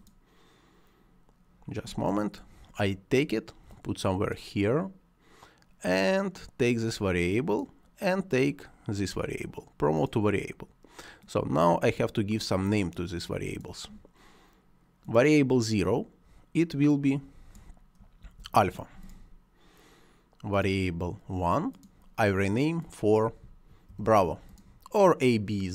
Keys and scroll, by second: 18.1 shift+a, 23.8 shift+b.